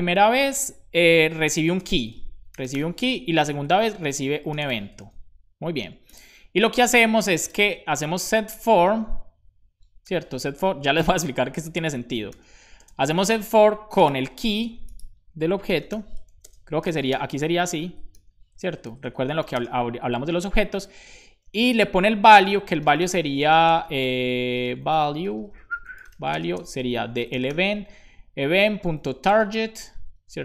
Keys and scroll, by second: 1.7 i, 1.8 space, 2.8-3.8 typing, 5.0 super+s, 6.6 Tab, 7.1-8.0 typing, 8.3 Return, 10.0 shift+9, 11.6 BackSpace, 12.7 shift+[, 12.7 space, 15.5-16.4 typing, 17.6 Left, 17.6 BackSpace, 17.6 ], 17.8 Left, 18.1 [, 19.5 shift+;, 19.5 space, 21.8 Up, 22.4 super+Right, 22.4 Return, 22.4-23.5 typing, 24.6-26.8 typing, 28.1-29.9 typing.